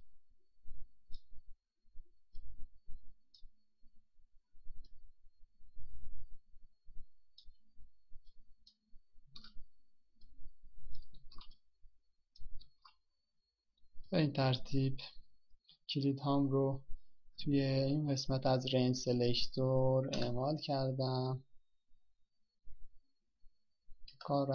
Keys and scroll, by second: 11.9 ctrl+c, 13.9 ctrl+v.